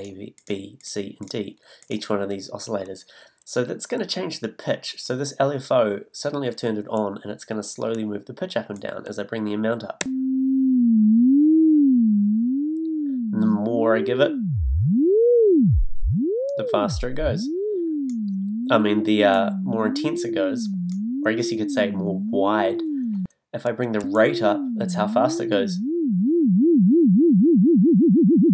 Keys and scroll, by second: 10.0 a, 24.0 a.